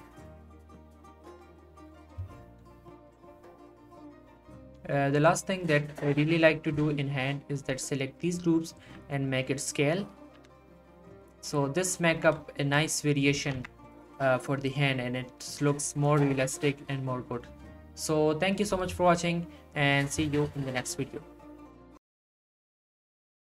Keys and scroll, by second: 8.8 s, 10.4 Tab, 12.1 Tab, 13.3 z, 13.5 Tab.